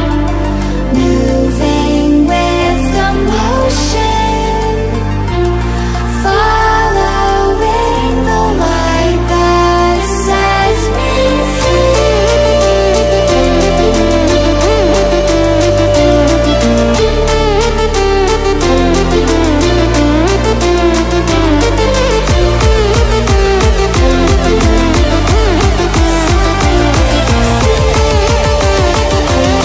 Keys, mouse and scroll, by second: 1.4-12.3 drag, 12.7 click, 14.8 right click, 16.5 click, 18.2 right click, 19.6 click, 21.2 right click, 22.8 click, 24.1 ctrl+alt+scroll down 1, 25.3-28.0 drag, 28.0 ctrl+z, 28.5 click, 29.5 right click.